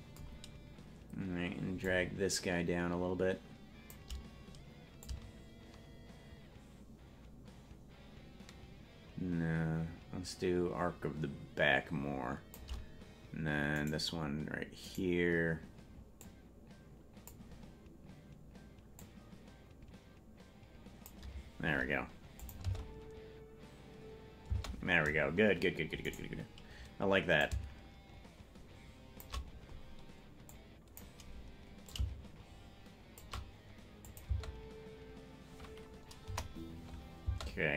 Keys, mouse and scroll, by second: 1.8-3.9 shift+drag, 5.0-12.6 drag, 14.0 right click, 16.1-17.3 drag, 16.1 right click, 18.9-21.1 drag, 22.4 click, 22.6 space, 24.6 space, 26.2 right click, 27.3-29.2 drag, 30.5 click, 31.8-33.2 drag, 34.1-35.5 drag, 34.3 space, 36.3 KP_0, 37.3 space.